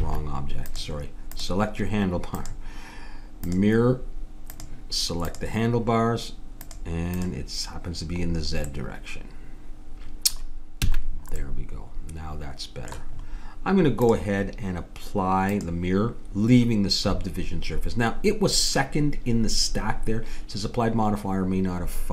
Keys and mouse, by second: 0.7-4.2 drag, 4.5-6.4 drag, 6.8-8.9 drag, 8.7-9.8 middle drag, 10.8 a, 14.1-20.9 drag.